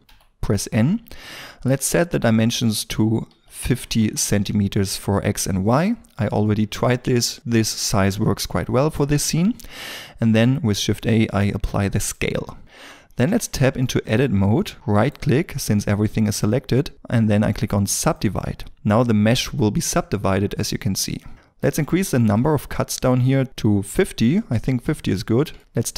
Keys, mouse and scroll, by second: 0.2 n, 3.3 KP_5, 3.6 KP_0, 4.0 Return, 10.8 ctrl+a, 12.6 scroll up 1, 13.8 shift+middle click, 14.9 right click, 23.5 Return, 25.1 middle click, 25.6 Tab.